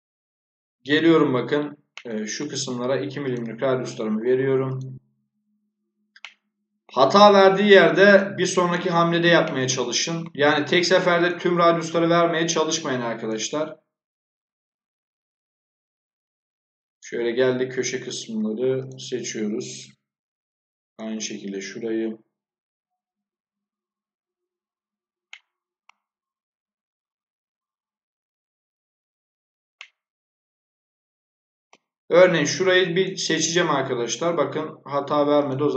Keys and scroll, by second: 13.4-14.2 typing.